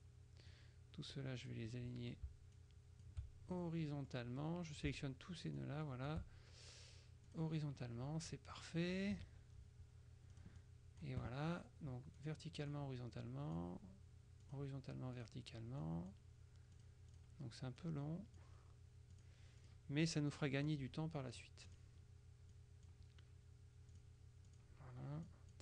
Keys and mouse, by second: 0.6-2.1 drag, 2.7 shift+click, 3.7 shift+click, 5.7 shift+click, 7.4 click, 9.3 KP_Subtract, 10.4 click, 12.3-14.1 drag, 14.5 click, 15.3 click, 16.9 click, 17.9 click, 19.2-20.3 drag, 20.4 click, 21.4 click, 22.6 click, 24.0 click, 25.3 click.